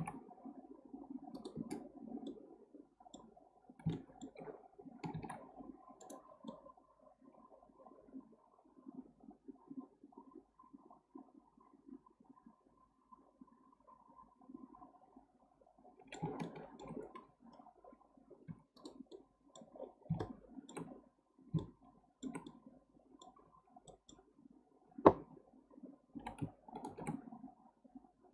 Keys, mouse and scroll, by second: 2.3-3.5 middle drag, 3.5-3.9 scroll up 1, 3.9-5.1 shift+middle drag, 5.1 ctrl+r, 6.5-9.5 middle drag, 16.4 shift+middle click, 17.1-18.2 scroll up 4, 18.6 2, 18.8 click, 19.1 middle click, 19.7-20.2 scroll down 6, 20.2 shift+middle click, 20.9-21.4 scroll up 4, 21.4 scroll down 1, 21.6-24.2 shift+middle drag, 24.2-26.1 scroll down 1, 26.1 g.